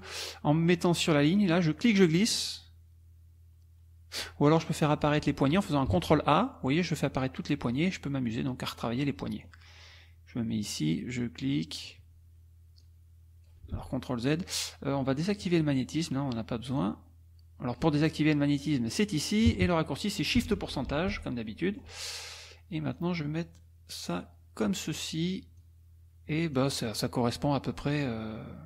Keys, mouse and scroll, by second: 1.7-4.4 drag, 4.5 click, 5.9 ctrl+a, 7.7-8.9 drag, 9.0 middle click, 10.6-12.1 drag, 12.8 click, 13.7 ctrl+z, 15.3 click, 16.8-18.0 drag, 18.9 click, 19.3 click, 21.5 shift+click, 24.0 click, 24.6 click, 25.6-28.3 drag.